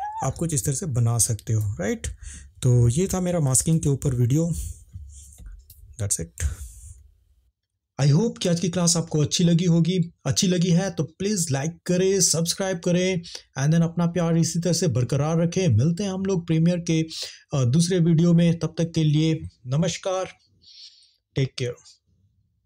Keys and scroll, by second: 0.6 space, 1.4 Escape, 3.7 ctrl+s.